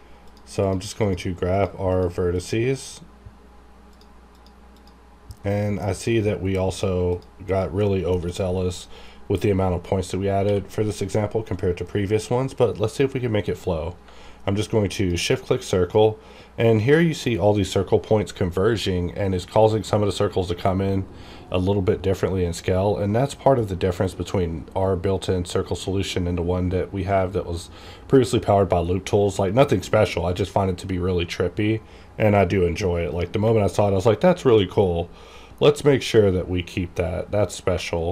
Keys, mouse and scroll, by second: 5.4 shift+middle click, 6.7 shift+click, 7.8 shift+middle click, 8.3-10.1 shift+scroll up 1, 10.4 q, 14.9 shift+click, 34.8-36.7 scroll down 1, 36.7-37.7 scroll up 1.